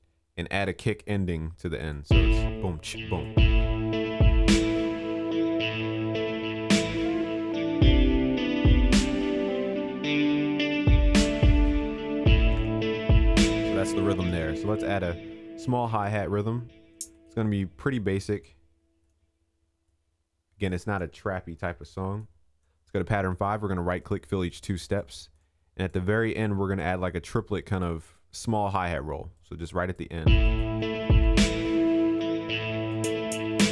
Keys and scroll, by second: 4.2 ctrl+s, 12.6 ctrl+s, 21.6 ctrl+s, 31.0 ctrl+s.